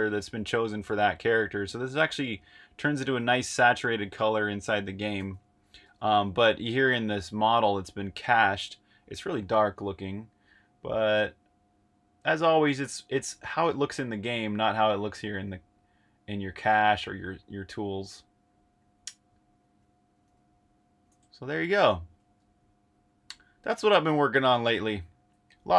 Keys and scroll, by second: 4.0 super+Tab, 5.8 super+Tab, 21.7 8.